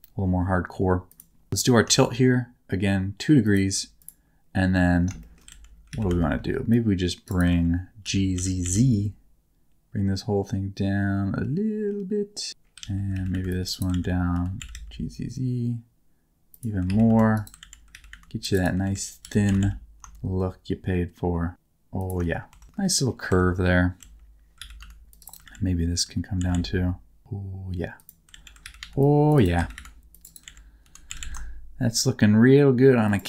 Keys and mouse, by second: 1.1 click, 1.5 r, 3.4 ctrl+shift+click, 4.0 click, 4.7 Tab, 5.2 shift+middle click, 5.5 alt+z, 5.9 alt+a, 6.0 c, 7.2 click, 7.5 alt+z, 8.0 g, 8.3 z, 8.6 z, 12.9 alt+z, 13.1 alt+a, 13.3 c, 13.7 right click, 13.9 alt+z, 14.3 g, 14.6 z, 14.7 z, 16.9 alt+a, 17.1 c, 17.6 alt+z, 17.9 alt+a, 18.1 c, 18.5 middle click, 18.8 alt+z, 19.2 g, 19.4 z, 19.6 z, 22.0 shift+click, 22.5 Tab, 23.6 Tab, 24.0 alt+z, 24.6 alt+a, 24.8 c, 25.2 middle click, 25.4 alt+z, 25.9 g, 26.4 z, 26.5 z, 27.9 click, 28.4 alt+z, 28.6 alt+a, 28.8 c, 29.3 click, 29.5 alt+a, 29.7 c, 30.2 click, 30.4 alt+z, 30.8 g, 31.1 z, 31.2 z, 33.0 shift+click.